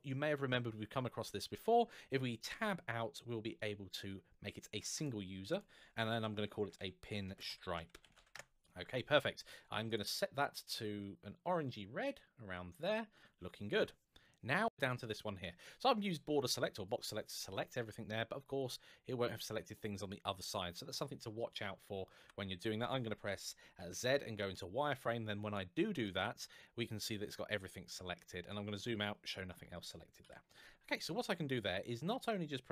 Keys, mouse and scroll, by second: 2.3 Tab, 4.7 click, 6.4-8.0 typing, 8.1 Return, 9.1 scroll down 1, 14.5 shift+middle click, 15.8 click, 18.2 middle click, 21.9 KP_1, 23.5 z, 24.2 click, 28.0-29.4 scroll down 1, 29.4-30.0 scroll up 1, 30.0 KP_1, 30.9 scroll up 1.